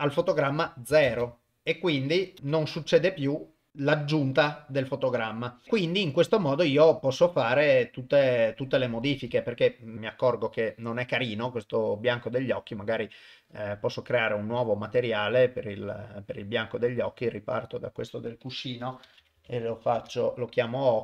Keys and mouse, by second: 1.1 shift+space, 2.4 shift+space, 3.2-5.6 drag, 6.8 click, 9.9 click, 13.5 click, 14.3-15.6 drag, 17.1 click, 17.7-20.0 drag, 19.4 c.